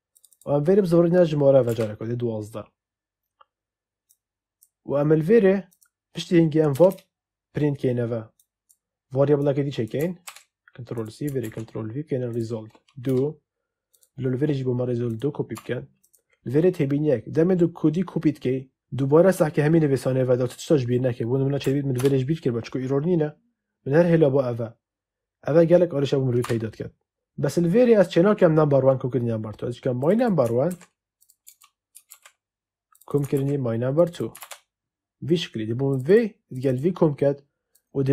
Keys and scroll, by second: 1.6 2, 6.7 Return, 10.1 ctrl+c, 13.0 2, 15.5 2, 21.5 Left, 21.9 BackSpace, 26.3 2, 30.6 ctrl+c, 32.0 ctrl+v, 33.3 ctrl+c, 34.3 ctrl+v.